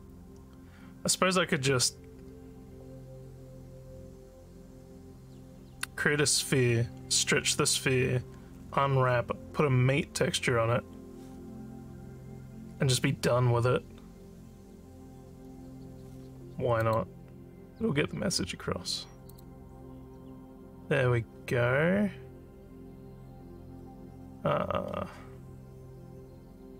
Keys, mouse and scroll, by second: 16.8 click, 19.2 click.